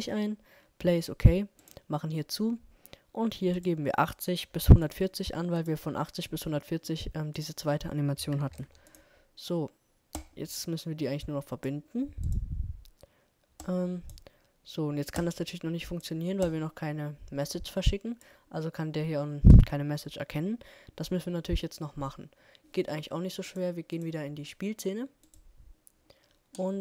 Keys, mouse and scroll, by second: 24.3-26.7 drag, 26.7-26.8 middle drag.